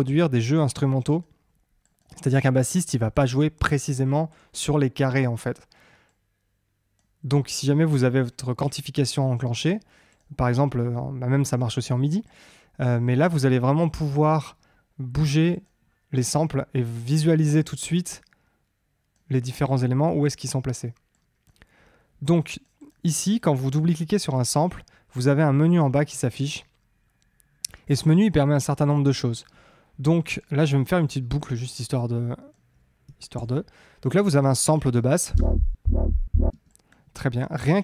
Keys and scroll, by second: 33.3 super+l, 35.3 space.